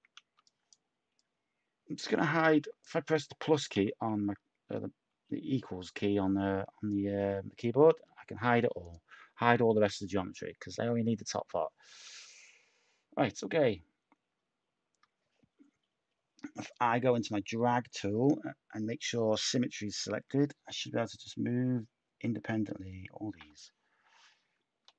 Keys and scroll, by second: 3.7 =, 8.0 /, 9.6 a, 24.8 ctrl+z.